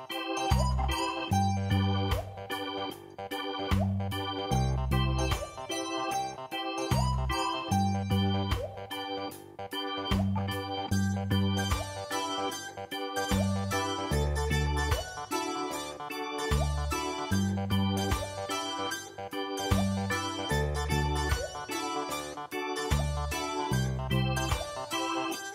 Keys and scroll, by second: 8.5 ctrl+t, 19.5 ctrl+space, 20.1 ctrl+space, 20.6 ctrl+space, 21.4 p.